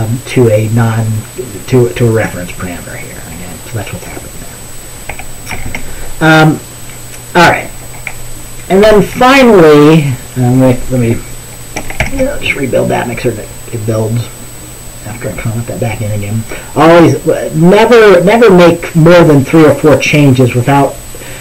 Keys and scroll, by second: 5.7 typing, 8.9 ctrl+s, 12.1 ctrl+b.